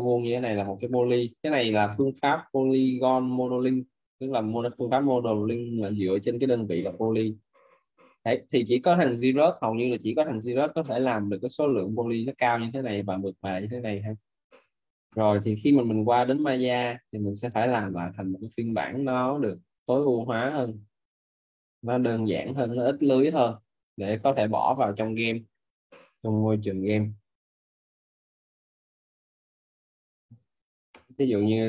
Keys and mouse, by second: 0.6 alt+right click, 20.7 click.